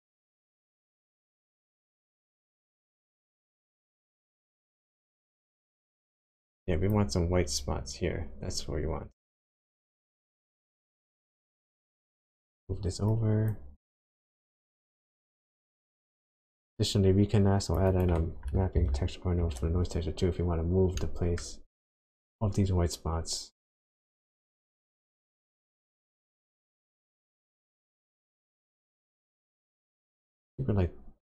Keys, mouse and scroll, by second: 1.8 click, 11.9-12.4 scroll down 3, 13.1 click, 14.0 click, 16.3 click, 16.7 click, 17.9 click, 18.9 ctrl+t, 20.2-20.9 scroll up 4, 21.0 middle click, 23.8 click.